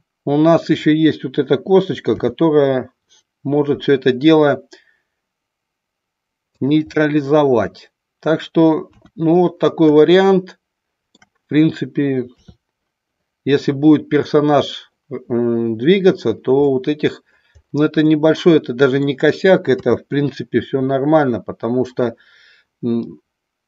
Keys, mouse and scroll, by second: 2.2 r, 6.6 click, 6.9-8.4 middle drag, 8.9 KP_1, 10.0-11.3 shift+middle drag, 12.3 KP_3, 16.7-17.5 middle drag, 18.0-19.0 middle drag, 19.8 KP_3.